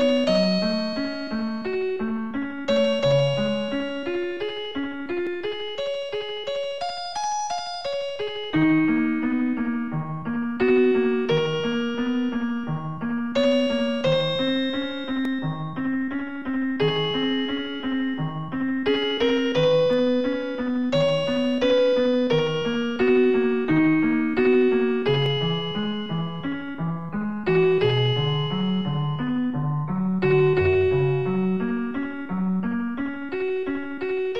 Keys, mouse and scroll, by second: 0.0 click, 0.3 ctrl+z, 1.0 click, 1.8 typing, 3.4 click, 4.3 click, 5.8 scroll up 1, 6.5 s, 8.4 click, 18.7 click, 19.1 i, 20.4 click, 20.8 i, 21.2 click, 22.0 click, 22.8 scroll down 2, 23.7 ctrl+s, 24.0 click, 25.0 click, 25.7 click, 27.4 0, 28.6 0, 31.2 scroll up 1, 32.6 middle click, 33.8-34.3 typing.